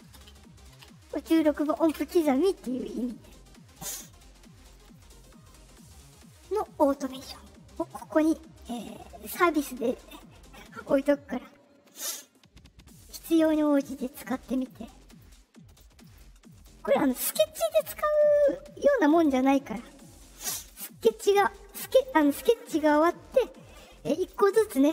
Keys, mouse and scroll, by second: 0.0-0.6 typing, 7.0 click, 12.8 click, 13.4 click, 14.0 click, 14.5 click, 15.0 click, 15.6 click, 16.0 click, 16.4 click, 20.5 click.